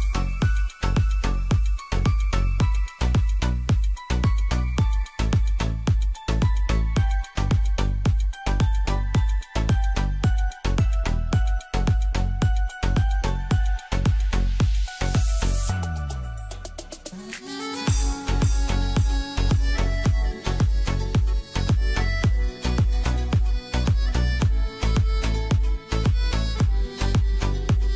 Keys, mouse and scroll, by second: 1.1 right click, 1.4-4.2 drag, 6.9 right click, 7.3 click, 7.7 Return, 8.1 right click, 8.6-11.4 drag, 12.6 right click, 13.0-17.1 drag, 17.1-22.8 shift+drag, 25.6 click, 26.8-27.9 drag.